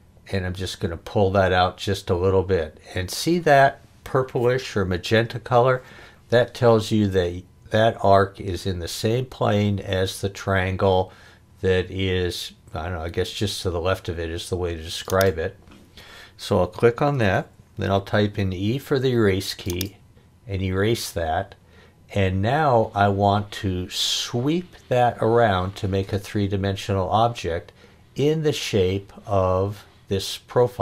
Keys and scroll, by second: 18.1 e.